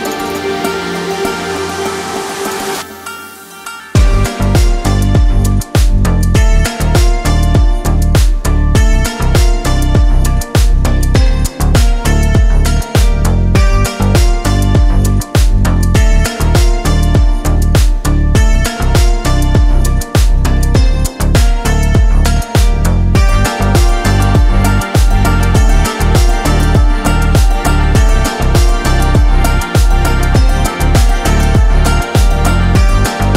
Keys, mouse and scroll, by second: 1.2 alt+click, 2.4 s, 3.4 y, 5.2 Return, 8.1 click, 8.6 click, 9.1 click, 9.6 click, 10.0 click, 10.5 click, 12.0 middle click, 12.6-13.2 scroll up 1, 13.2 middle click, 13.2-13.6 scroll up 1, 14.1 click, 16.8 click, 18.2 Tab, 18.8-19.5 middle drag, 19.6-20.5 scroll down 2, 20.0-20.5 middle drag, 20.7 Tab, 21.6 2, 22.3 click, 22.9 shift+click, 23.7 click, 24.5 middle click, 25.7 g, 26.2 x, 28.5 click, 29.2 middle click, 32.7 click.